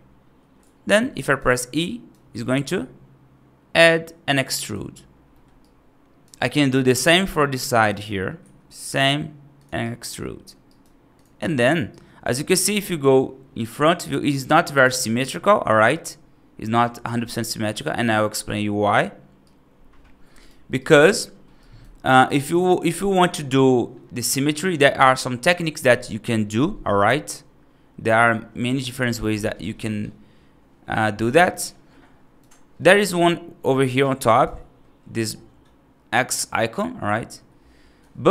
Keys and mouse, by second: 1.1 right click, 1.6 right click, 2.2 e, 5.2 middle click, 5.5 right click, 6.3 right click, 7.1 click, 7.4 right click, 8.3 e, 9.7 right click, 10.5 right click, 11.0 click, 11.3 right click, 11.7 right click, 12.8 middle click, 13.7 middle click, 17.0 right click, 18.2 right click, 19.3-20.3 right drag, 20.7 right click, 21.5 right click, 22.2 right click, 29.4-32.2 right drag, 37.2 e.